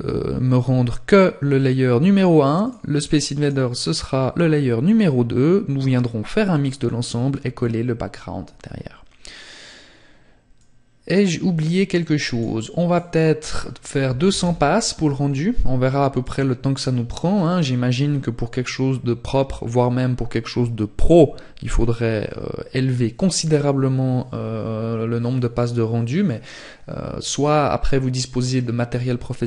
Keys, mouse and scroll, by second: 1.5 click, 9.4 click, 11.8 click.